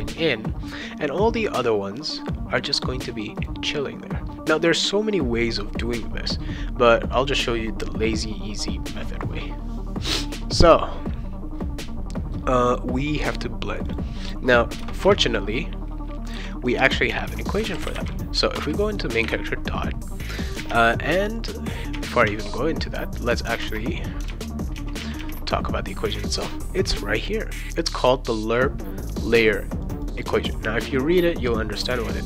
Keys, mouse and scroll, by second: 3.3 click, 12.7 click, 13.8 click, 14.8 shift+Return, 17.3-19.2 typing, 18.5 Return, 20.6 alt+Tab, 21.9 alt+Tab, 22.3 alt+Tab, 23.6 alt+Tab, 24.3 alt+Tab, 24.7 alt+Tab, 25.0 alt+Tab, 27.2 click, 29.8 click, 30.0 click, 30.2 click.